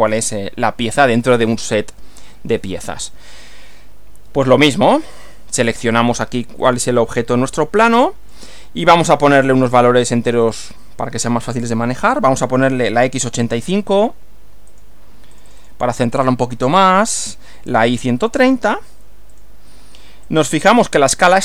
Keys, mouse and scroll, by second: 0.3 click, 5.1 click, 6.7-8.5 drag, 9.2 click, 10.3 click, 13.5-14.4 typing, 14.7 click, 15.3 click, 17.5-18.7 typing, 19.3 click, 20.3 click.